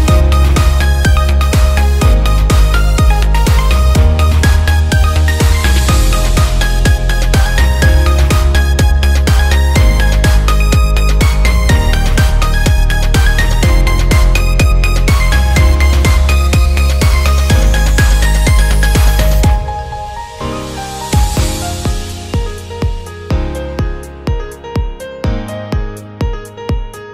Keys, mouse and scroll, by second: 7.1 ctrl+click, 7.8 click, 9.1 Tab, 9.6 click, 11.1 click, 11.2 click, 12.1 click, 12.9 click, 13.9 click, 15.0 click, 16.0 alt+click, 16.8 click, 18.8 shift+click, 19.6 shift+click, 19.9 click, 20.8 shift+click, 22.2-23.6 shift+drag, 24.8 ctrl+click, 25.8 ctrl+click, 26.4 click.